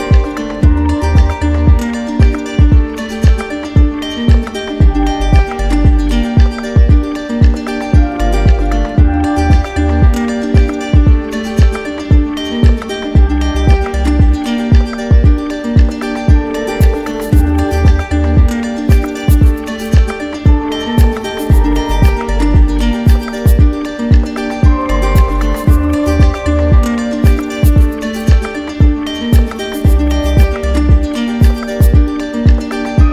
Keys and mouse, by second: 1.0-2.1 drag, 2.5-3.6 drag, 5.9-7.0 drag, 8.7-10.1 drag, 10.1 alt+right click, 11.1 alt+right click, 15.0-16.0 drag, 17.4-18.4 drag, 19.3 right click, 23.5 right click, 25.5 right click, 27.4 right click, 30.5-31.6 drag, 32.8-33.1 drag.